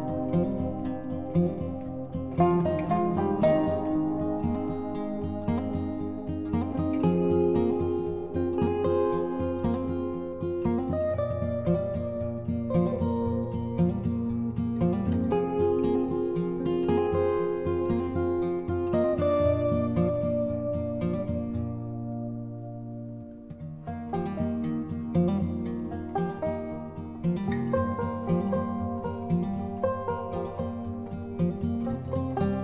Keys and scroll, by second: 0.2 ctrl+-, 0.7 ctrl+=, 16.8 ctrl+0, 17.1 ctrl+-.